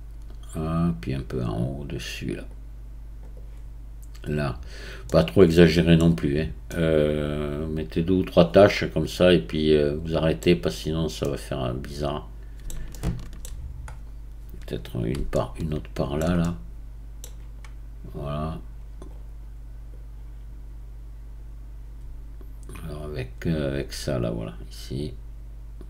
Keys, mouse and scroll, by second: 2.5 click, 3.3-5.1 right drag, 5.1-6.0 middle drag, 6.0-6.4 scroll down 4, 6.7-9.7 middle drag, 10.4-11.3 scroll down 1, 11.3-13.5 middle drag, 13.5-14.7 scroll down 7, 15.3-19.1 shift+middle drag, 19.1-20.3 drag, 20.3-23.8 right drag, 25.0-25.8 drag.